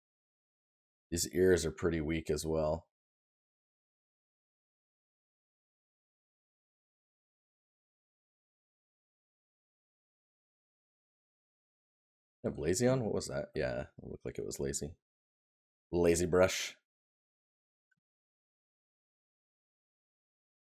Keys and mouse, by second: 0.1 right click, 17.2 click.